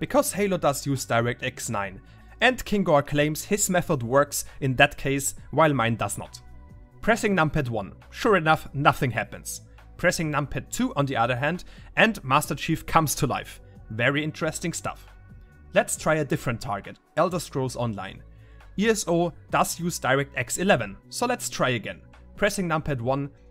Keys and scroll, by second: 1.3-14.4 typing, 19.4-21.2 typing, 22.7-23.5 typing.